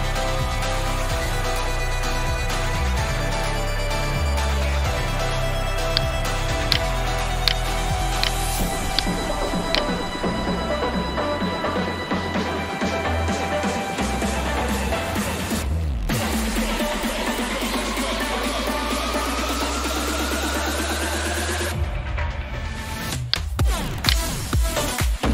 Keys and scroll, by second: 1.2 Tab, 2.4 Tab, 4.5 Return, 11.5 F2, 16.8-18.3 typing, 20.7 Return.